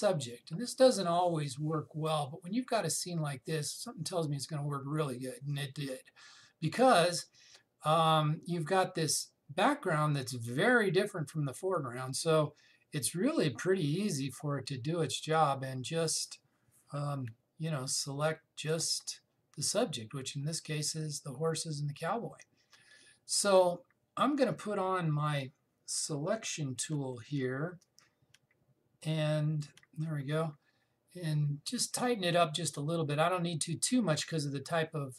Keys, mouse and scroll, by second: 0.6 click, 15.9 click, 18.8-22.0 alt+drag, 29.7 alt+click.